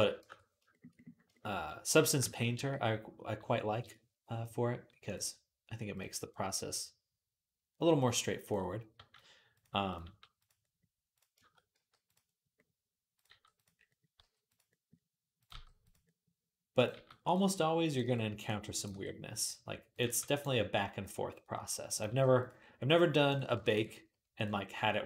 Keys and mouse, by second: 0.0 shift+Tab, 1.9-4.8 shift+middle drag, 2.3 g, 4.8-9.4 drag, 8.8 g, 9.4-11.0 middle drag, 9.8 g, 11.0-16.1 shift+drag, 11.5 g, 13.1 g, 14.0 g, 15.4 g, 16.1 middle click, 16.5 click, 16.6-17.7 middle drag, 16.7 g, 17.7 click, 17.7 middle click, 17.8 g, 18.5 click, 18.6-21.0 middle drag, 18.7 g, 19.7 click, 19.9 g, 21.7 click, 21.9 g, 23.1 click, 23.1-25.0 ctrl+middle drag, 24.2-25.0 drag, 24.2 right click.